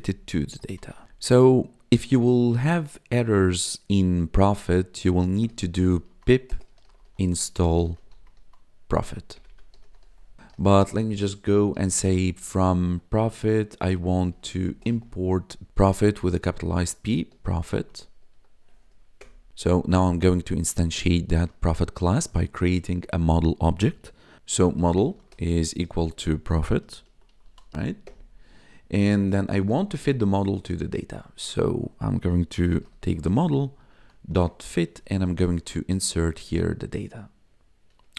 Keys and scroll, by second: 0.3 t, 0.6 o, 5.2 ctrl+/, 5.6-12.5 typing, 12.8 Tab, 13.7-15.7 typing, 17.0-18.2 typing, 18.3 Tab, 19.2 Return, 19.5 BackSpace, 24.4-28.1 typing, 32.3-35.9 typing, 36.0 Right.